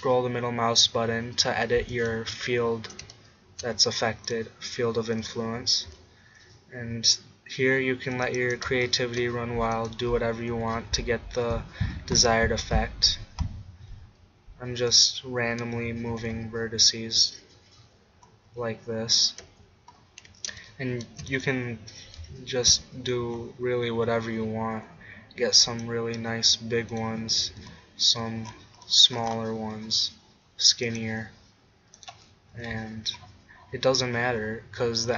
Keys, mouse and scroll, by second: 2.1-5.6 middle drag, 5.6 click, 5.6 g, 8.4-11.3 drag, 10.5 g, 15.0-17.0 drag, 16.1 g, 19.3 click, 19.5 Tab, 19.8 click, 20.2 Tab, 22.0 g, 25.8-27.0 drag, 27.4 g, 27.6-28.6 drag, 31.0-32.6 middle drag, 32.6 click, 32.6 g.